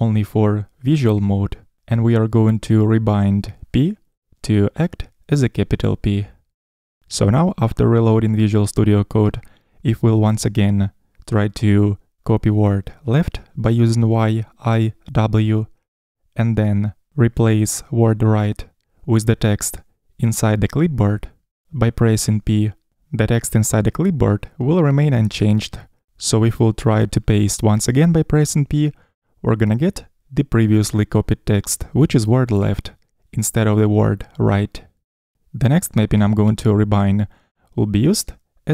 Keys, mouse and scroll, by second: 15.4 typing, 16.8 y, 23.0 typing, 24.3 p, 29.3 p.